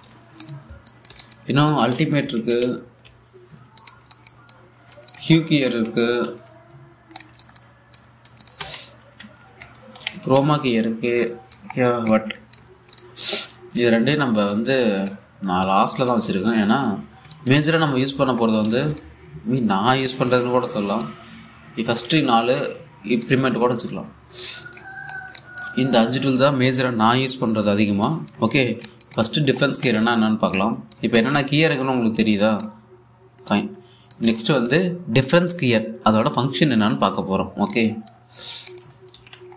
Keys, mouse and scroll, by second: 0.0-1.2 typing, 1.0 click, 2.5 Tab, 2.6-4.2 typing, 4.4 click, 5.8 Tab, 5.9-6.9 typing, 7.8 click, 9.2 Tab, 9.4-11.4 typing, 11.3 click, 12.4-12.7 scroll down 1, 12.7-16.9 drag, 16.9 typing, 17.8 scroll up 1, 17.9 click, 19.1 scroll down 1, 19.3-26.0 alt+drag, 26.7-27.5 scroll down 1, 28.3 scroll up 1, 28.7 click, 29.3 scroll down 1, 29.5 alt+click, 30.3 scroll down 1, 30.5 alt+click, 32.5-32.9 scroll down 1, 32.9-36.8 drag, 36.9 click, 37.5 ctrl+c, 38.3 alt+click, 39.1 scroll up 1, 39.3 click.